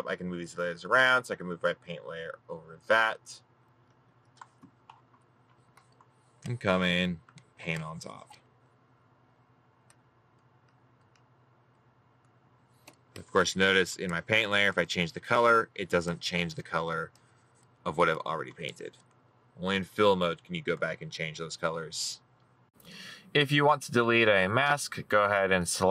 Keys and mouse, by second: 19.9 middle click.